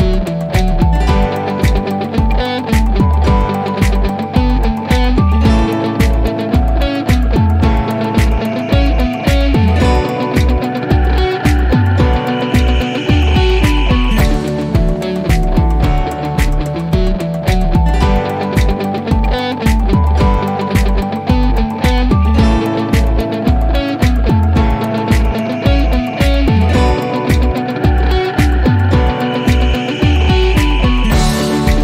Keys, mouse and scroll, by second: 21.6 click, 25.8 click, 28.1 F3, 29.6 click.